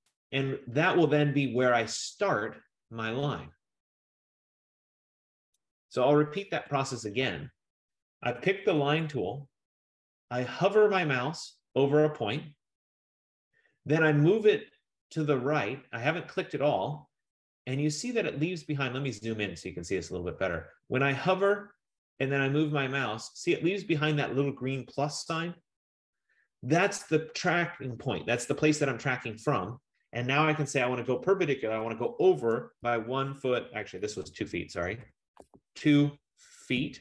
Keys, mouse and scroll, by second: 0.0-0.1 typing, 5.8 click, 6.6 Return, 9.1 click, 11.1 F15, 18.0-24.1 middle drag, 18.0 scroll, 18.8-19.6 scroll, 32.7-33.6 typing, 34.6-37.0 typing.